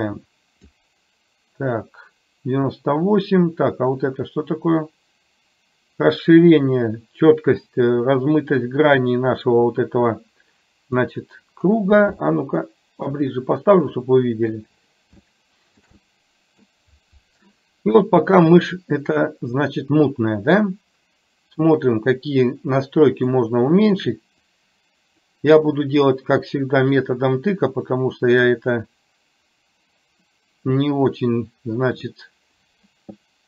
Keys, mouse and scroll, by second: 4.1-8.0 drag, 8.6-11.1 drag, 12.2-13.2 shift+middle drag, 14.0-14.6 middle drag, 15.4-15.9 shift+middle drag, 16.1-16.7 middle drag, 21.7-23.5 drag, 24.6 click, 27.2-32.1 drag.